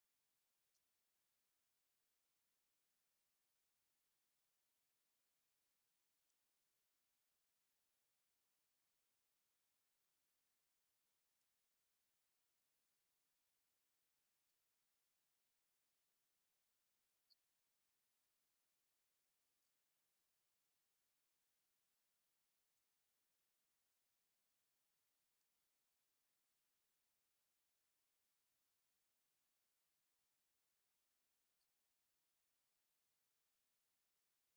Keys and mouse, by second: 1.0 click, 1.4 right click, 3.5 click, 4.8 x, 6.1 right click, 6.5 x, 10.3 right click, 15.9 click, 18.5 click, 20.2 click, 27.7 click.